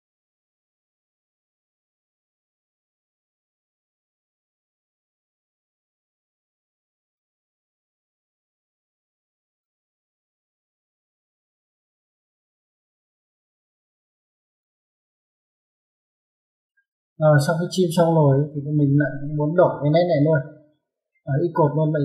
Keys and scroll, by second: 19.0 Escape.